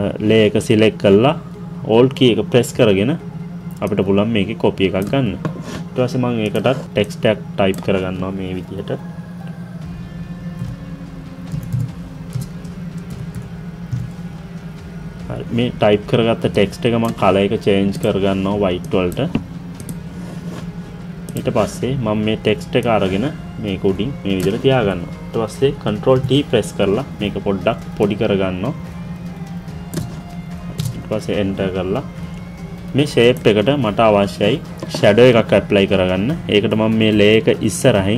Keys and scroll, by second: 30.8 Return.